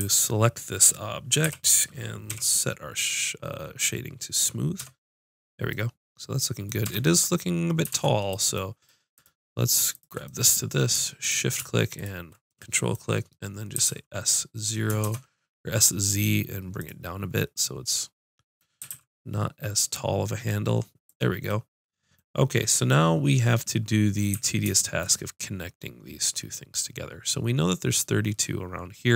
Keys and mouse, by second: 0.0 a, 1.4 l, 2.3 w, 4.8 Tab, 6.9 Tab, 8.0 ctrl+Tab, 9.2-10.4 drag, 11.1 click, 11.4 click, 12.5-13.7 drag, 13.8 s, 16.9-18.0 drag, 18.2 click, 18.8 s, 21.2-23.0 drag, 24.3 a.